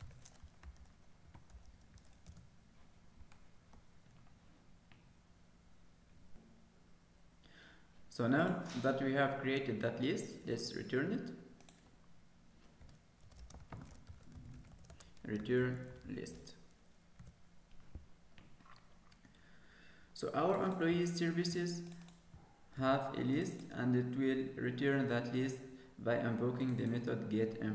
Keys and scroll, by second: 1.4 Escape, 22.8 ctrl+s.